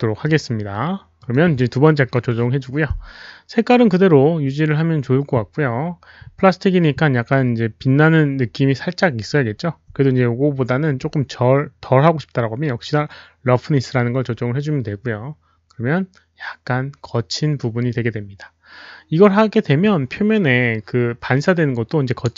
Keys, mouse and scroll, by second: 1.1 click, 10.0 click, 13.7 click, 15.3 click.